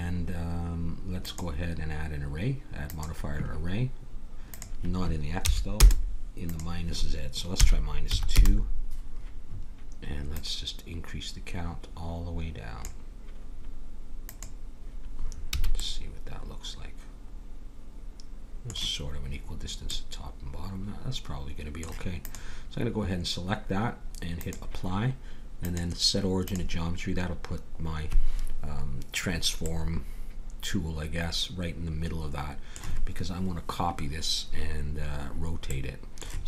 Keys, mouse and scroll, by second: 1.2-3.1 drag, 4.5-6.4 drag, 6.5-8.3 drag, 10.3-12.0 drag, 14.2-15.9 drag, 15.5 a, 15.8 middle click, 19.9-22.2 middle drag, 22.2-24.0 drag, 24.3-29.7 drag, 29.7 middle click.